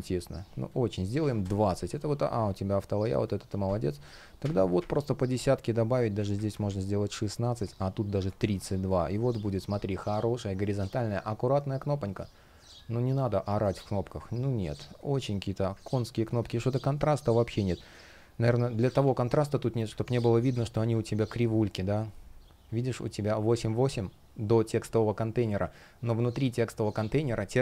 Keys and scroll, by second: 1.1 Return, 4.1 shift+Up, 4.4 shift+Up, 7.8 shift+Up, 8.1 Down, 9.7 space, 14.4 space, 16.2 shift+p, 18.7 super+z.